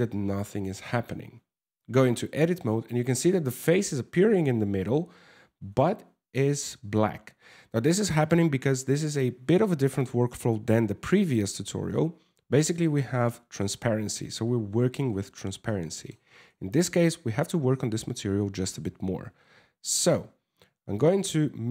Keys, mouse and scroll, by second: 1.6 Tab, 1.7 scroll down 10, 1.9 scroll up 3, 15.3 middle click, 16.0 scroll down 3, 19.2 Tab, 20.6 click, 21.6 middle click.